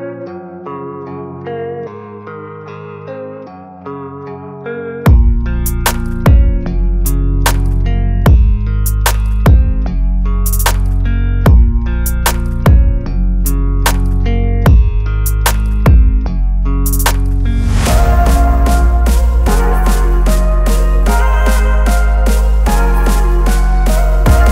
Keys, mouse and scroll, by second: 0.5 click, 3.0 click, 7.0 right click, 7.8-11.4 drag, 16.4 click, 18.3-19.0 alt+right drag, 20.6 click, 23.0 ctrl+t.